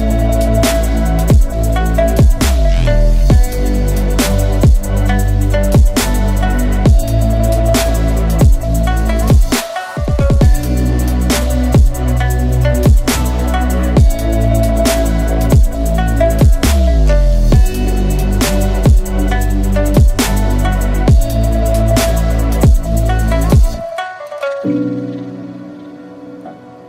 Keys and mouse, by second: 1.5-2.1 drag, 2.1 Tab, 2.4 ctrl+s, 3.2 drag, 3.6 shift+drag, 4.0 Tab, 5.7 2, 6.5 1, 8.6 f, 8.7 a, 9.4-10.1 drag, 10.9 ctrl+z, 11.7 a, 13.7 k, 16.4 a, 18.4 a, 18.6 q, 19.6 a, 20.1 ctrl+s, 20.3-21.0 drag, 21.1 Tab, 21.3-23.0 drag, 23.1 Tab, 23.3-24.9 drag, 26.0-26.8 drag.